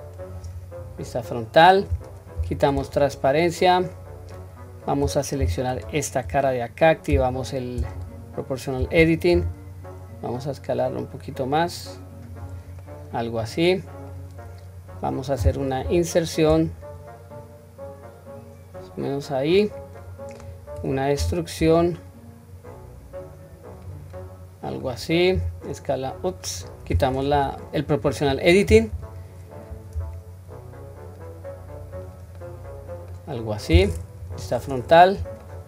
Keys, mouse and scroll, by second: 0.2 click, 2.4 q, 2.9-4.4 middle drag, 5.4 3, 5.7 click, 7.2 o, 9.4 s, 12.9-14.2 middle drag, 14.4-15.8 scroll up 1, 15.8-17.5 scroll up 1, 20.0 middle click, 21.2 e, 24.2 middle click, 25.4 s, 30.0 s, 32.4-33.2 middle drag, 33.4 scroll down 1, 34.2 KP_1, 34.8 scroll down 1, 35.4 shift+middle click.